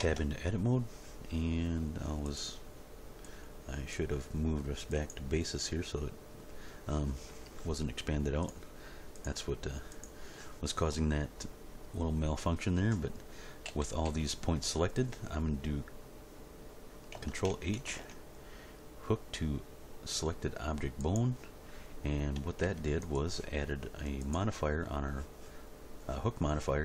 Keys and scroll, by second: 0.0 Tab, 13.6 a, 17.9 ctrl+h, 22.6 Tab.